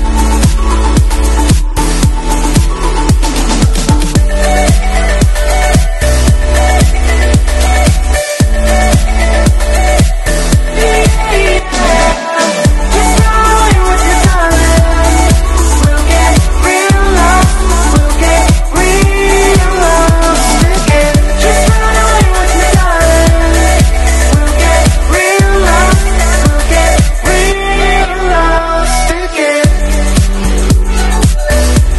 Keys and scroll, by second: 0.1 super+=, 0.4 [, 10.6 super+z, 14.0 super+z, 14.6 super+z, 14.7 super+z, 14.8 super+[, 15.3 super+z, 16.2 alt+super+z, 22.5 super+z, 23.4 super+z, 24.6 super+z, 27.5 super+z, 28.5 super+[.